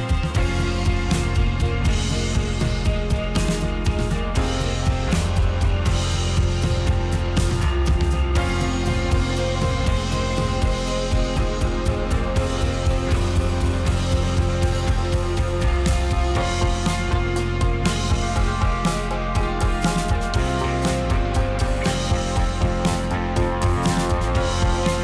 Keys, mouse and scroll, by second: 1.1-3.0 middle drag, 3.0 click, 3.2-5.4 middle drag, 5.4 click, 5.6-6.7 middle drag, 9.0 shift+click, 9.2 shift+click, 9.4 shift+click, 9.5 shift+click, 9.6 shift+click, 9.8 shift+click, 10.0 shift+click, 11.0 g, 12.2-14.4 middle drag, 14.4 drag, 14.5-16.1 middle drag, 16.1 click, 17.8-18.9 drag, 19.0 alt+d, 21.6 drag, 21.7-22.6 middle drag, 22.6 click, 22.8 middle click, 23.7 click, 24.2 click, 24.7 shift+click, 24.8 shift+click.